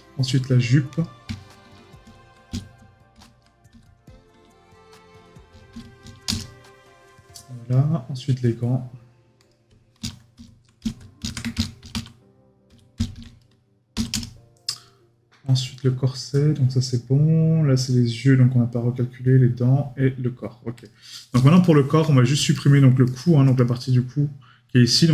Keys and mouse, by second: 21.5 right click.